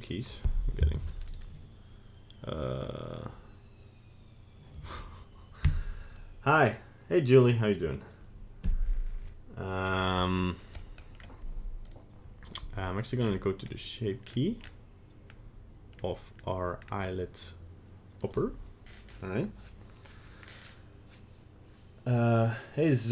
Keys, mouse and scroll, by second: 10.8 middle click, 11.2-11.6 scroll up 2, 11.9 right click, 12.5 right click, 13.2-13.7 scroll down 5, 13.7-14.3 scroll up 1, 14.3 scroll down 2, 14.6-15.3 scroll up 3, 15.3-15.8 scroll down 1, 16.0-16.4 scroll up 1, 16.7-17.4 scroll up 3, 18.4 click.